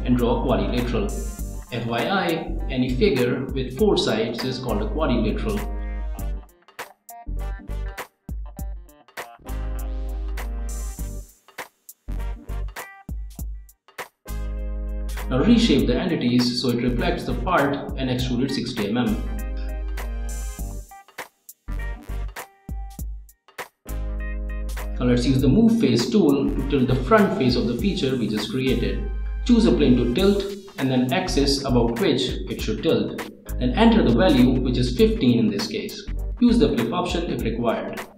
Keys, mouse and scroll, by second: 0.1 click, 1.3 click, 4.0 click, 4.8 click, 5.7 right click, 6.3 click, 10.5 click, 10.9 click, 11.4 click, 12.2 click, 12.6 scroll down 1, 13.3 click, 13.9 click, 15.1 scroll down 1, 16.0 click, 16.5 middle click, 17.4 click, 17.7 middle click, 18.4 click, 19.7 click, 21.1-22.6 drag, 24.0 click, 25.6 click, 26.6 click, 28.0 click, 28.7 click, 29.7 click, 31.2 click, 35.0 click, 37.8 click.